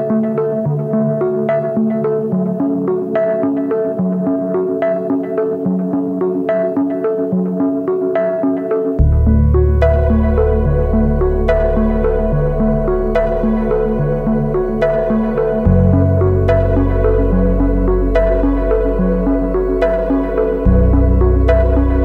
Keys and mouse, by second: 2.2 click, 2.7 shift+drag, 3.7 Tab, 4.0 a, 4.8 shift+click, 6.3 a, 6.7 shift+d, 8.2 x, 9.0 shift+drag, 9.5 Tab, 10.0 ctrl+s, 10.3 shift+drag, 11.0 a, 11.5 shift+drag, 11.8 z, 12.1-13.8 drag, 13.9 shift+drag, 14.7 Tab, 15.0 shift+click, 15.5 click, 16.5 3, 16.7 shift+drag, 19.4 click, 20.3 Tab, 20.8 ctrl+s, 21.4-22.0 drag.